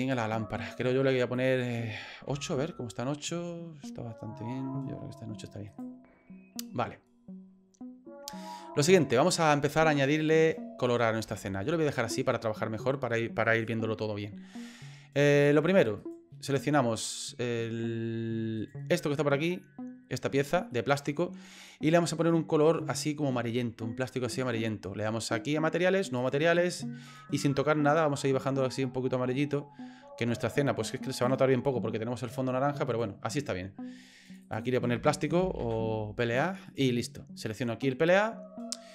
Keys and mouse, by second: 0.0 click, 1.3-3.6 drag, 5.7 right click, 11.0 middle click, 11.4 shift+middle click, 16.0 right click, 18.6 right click, 19.3 middle click, 20.7 middle click, 26.3 click, 27.1 click, 32.9 right click, 34.3 click, 34.5-36.9 drag, 37.6 right click.